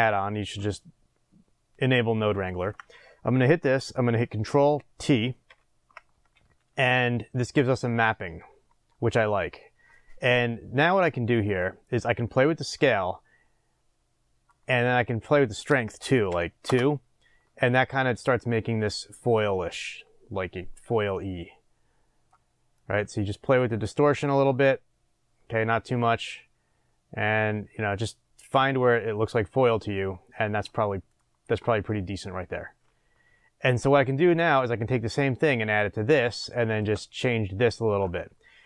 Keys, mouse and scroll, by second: 2.5 click, 5.5 ctrl+t, 12.2-31.1 drag, 16.7 Return, 30.3-31.1 scroll down 2, 31.8-38.6 middle drag, 34.5-35.2 scroll up 2, 35.2-36.0 scroll up 1, 36.0-36.5 scroll down 2.